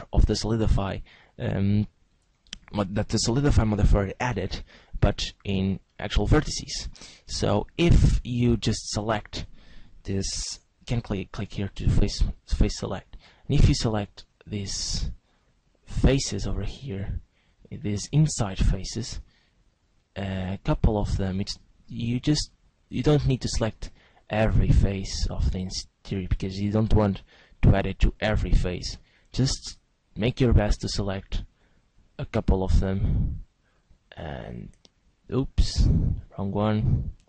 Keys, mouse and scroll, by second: 5.9 middle click, 7.6 click, 8.0-9.2 scroll up 1, 9.2 right click, 9.2-9.5 scroll up 3, 11.4 click, 12.2 right click, 13.2 shift+right click, 13.8 right click, 15.8 shift+right click, 16.8 shift+right click, 16.8 middle click, 19.2 shift+right click, 19.7 shift+right click, 21.8 middle click, 23.0 middle click, 23.9 shift+middle click, 24.6 middle click, 25.6 shift+middle click, 26.6 shift+middle click, 27.2 shift+middle click, 28.1 shift+right click, 28.8 shift+right click, 29.5 shift+right click, 30.2 shift+right click, 30.8 shift+right click, 31.8 shift+right click, 32.8 shift+right click, 33.7 shift+right click, 34.2 shift+right click, 35.6 shift+right click.